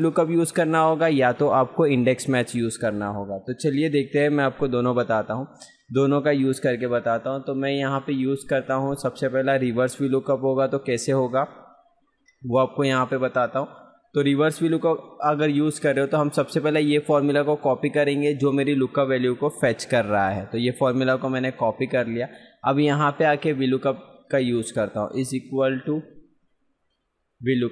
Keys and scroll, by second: 16.0 F2, 17.7 ctrl+c.